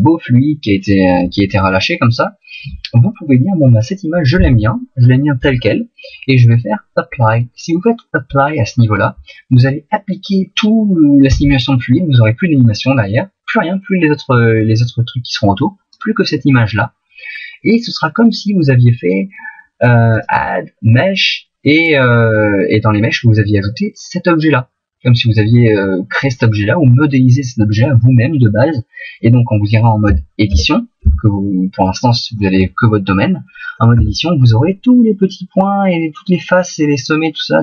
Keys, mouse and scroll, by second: 4.3 middle click, 13.5 click, 30.4 Tab, 30.6 Tab, 31.0 Tab, 34.0 Tab.